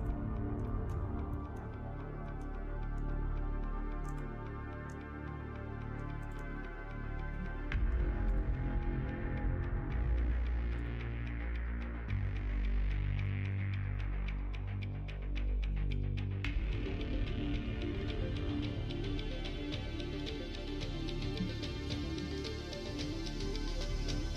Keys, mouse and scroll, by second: 0.6 middle click, 1.3 middle click, 4.0-6.5 drag, 13.2 middle click, 13.8 middle click, 14.4 middle click, 15.5 middle click, 16.4 click, 17.9 click, 19.6-24.2 drag.